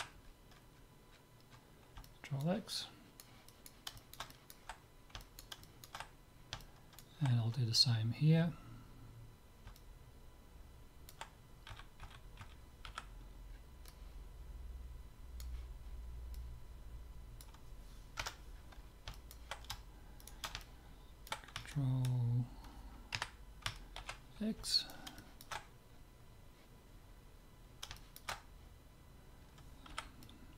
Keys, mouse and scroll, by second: 0.2 middle click, 2.1-8.6 middle drag, 9.8-11.6 middle drag, 11.8 a, 12.1 a, 12.5 a, 12.9 c, 18.6-22.4 middle drag, 20.2-22.0 drag, 22.5 middle click, 23.2 KP_Decimal, 24.0 ctrl+x, 24.7-27.0 middle drag, 27.0-28.0 scroll up 1, 28.0-29.6 middle drag, 29.6-30.0 scroll up 1, 29.9 c, 30.0 middle click.